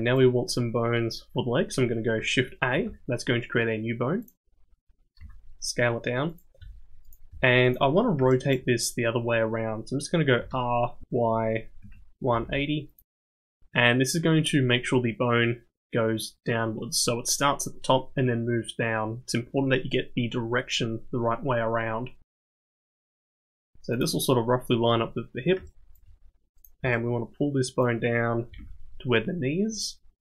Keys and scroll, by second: 2.7 shift+a, 5.2 s, 6.6 g, 7.3 s, 10.4 r, 23.2 g, 28.5 g.